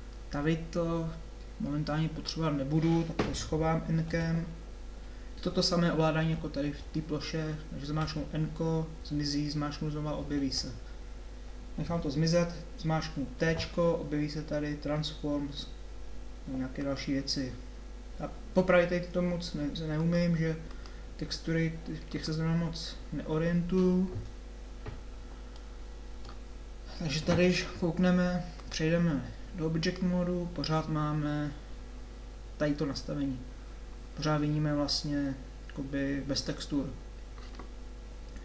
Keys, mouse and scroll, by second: 5.7 n, 6.2 n, 6.7 n, 25.5 middle click, 29.1 click.